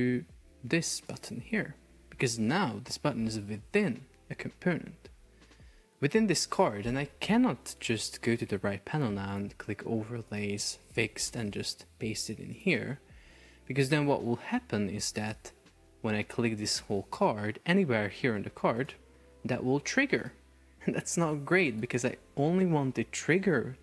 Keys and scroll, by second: 4.8 Escape, 11.7 super+v, 13.5 Escape, 15.1 super+p.